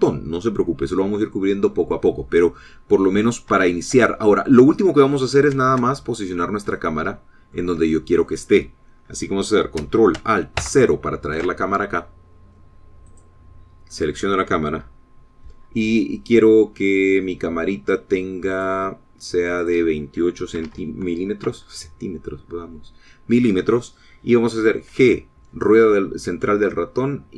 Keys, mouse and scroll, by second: 3.9-4.4 scroll down 4, 4.8 shift+click, 5.3 shift+click, 6.1 middle click, 7.0 shift+middle click, 7.3 shift+middle click, 7.6 middle click, 8.1 shift+click, 11.9 ctrl+alt+KP_0, 14.4 click, 19.9 click, 20.9 click, 21.9 KP_2, 22.0 KP_8, 22.8 KP_Enter, 26.2 g.